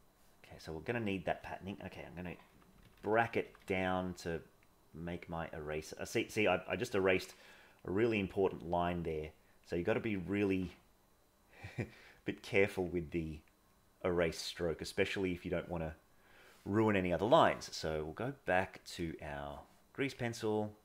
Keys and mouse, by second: 2.6-4.1 [, 4.1 click, 4.9-6.3 drag, 6.7-7.7 drag, 8.0 click, 9.4 click, 9.9 click, 11.2 click, 12.4 click, 13.2 click, 13.8-14.8 drag, 18.4 click.